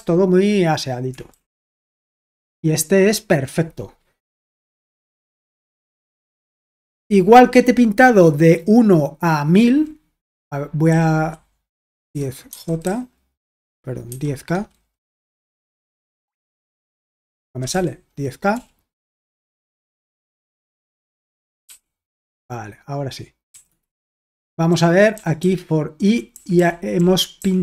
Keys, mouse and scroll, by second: 1.3-1.9 typing, 2.3 Return, 10.9-13.4 typing, 16.0-18.6 typing, 19.8-20.6 typing, 21.7 k, 23.5-27.6 typing.